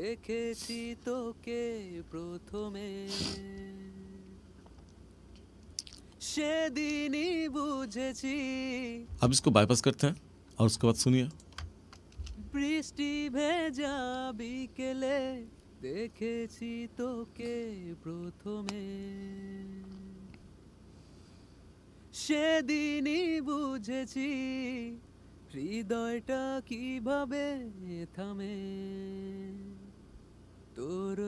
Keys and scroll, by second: 9.0 space, 12.1 space.